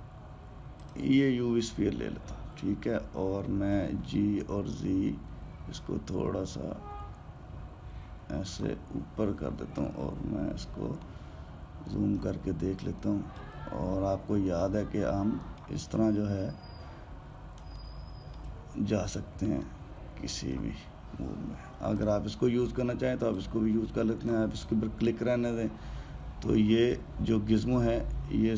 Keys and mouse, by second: 4.6 g, 11.8-15.4 ctrl+middle drag, 16.2 alt+middle click, 18.5-22.7 ctrl+middle drag, 22.7 click, 24.2 click, 27.6-28.0 drag.